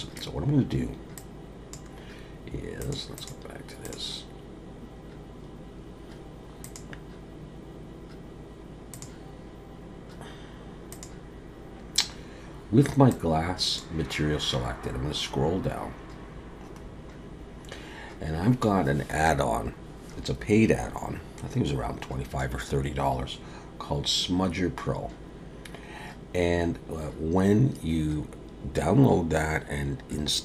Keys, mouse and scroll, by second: 1.2 click, 3.2 click, 6.6 click, 10.9 click, 13.1 click, 14.9-18.1 scroll down 27, 18.3-21.3 scroll down 1, 23.7-26.7 scroll down 1.